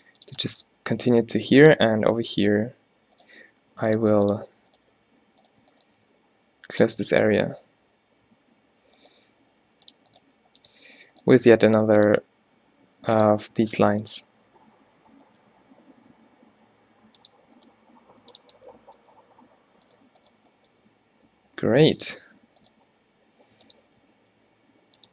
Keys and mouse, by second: 1.2 e, 1.9 e, 3.6 g, 4.1 e, 5.0 f, 6.1 x, 7.5 g, 9.3 e, 10.2-11.4 drag, 10.3 g, 11.4 e, 12.3 e, 13.4 e, 14.5 e, 16.2 g, 17.8 g, 21.0 f, 22.1 alt+w, 22.8 g, 24.0 g.